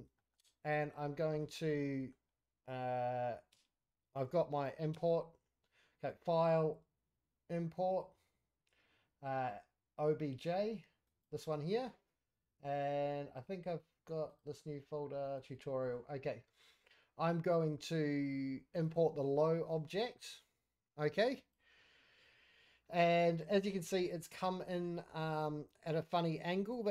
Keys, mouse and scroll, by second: 0.1 shift+scroll up 1, 0.3 shift+middle click, 0.6 click, 1.1 middle drag, 1.4-1.8 scroll down 5, 1.8 middle click, 2.3-3.5 scroll up 2, 3.5 q, 4.9 q, 6.1-11.3 drag, 22.7 scroll down 1, 22.8-24.0 middle drag, 24.1-24.5 scroll up 4, 24.5 middle drag, 24.9 scroll down 1, 25.2 middle drag, 25.8 scroll up 1, 26.6 click.